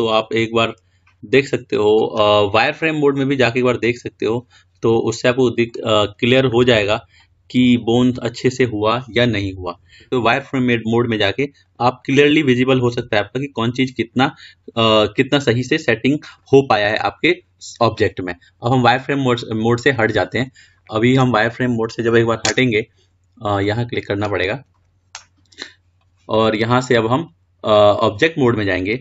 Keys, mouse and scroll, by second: 4.8 click, 10.6 g, 11.8 click, 13.1 g, 20.7 click, 24.9 click, 27.0-29.0 drag.